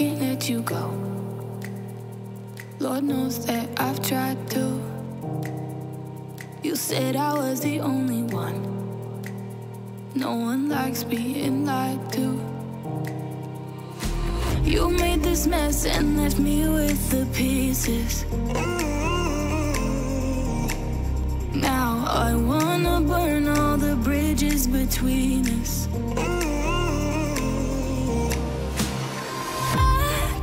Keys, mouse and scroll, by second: 2.2 ], 2.6 x, 5.2 [, 15.9 Return, 16.7 middle click, 16.7 ctrl+alt+scroll, 17.0 ], 18.5 alt+Tab, 19.3 ctrl+a, 19.6 ctrl+d, 20.0 b, 21.0 x, 21.8 x, 24.8 ctrl+0, 26.8 Return, 27.8 Return, 28.0 Up, 28.1 Down, 28.2 Return, 28.4 e, 28.7 Return, 29.0 e, 29.3 [, 30.1 [.